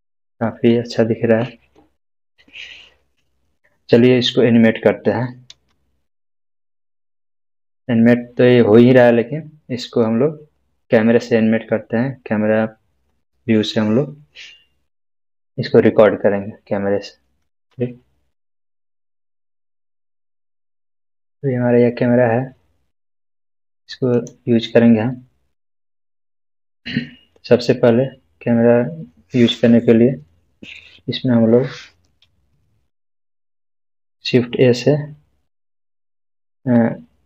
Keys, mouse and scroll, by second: 2.6 scroll down 1, 5.5-7.3 scroll down 1, 7.3 space, 17.5 space, 18.1 space, 24.1 click, 32.3 click.